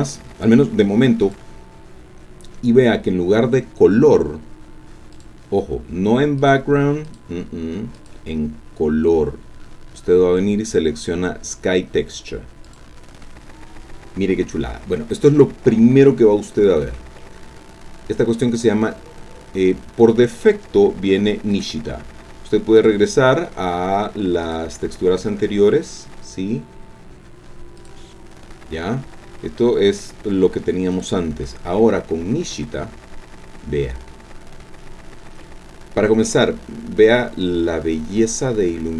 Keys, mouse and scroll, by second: 1.2 click, 5.1 click, 6.4 click, 7.0 click, 7.9 click, 12.6 click, 16.4-17.2 scroll down 2, 17.2-20.7 drag, 21.5 click, 22.8 click, 24.5 click, 27.8 click, 30.0 click, 30.9 click, 36.3-38.9 ctrl+drag.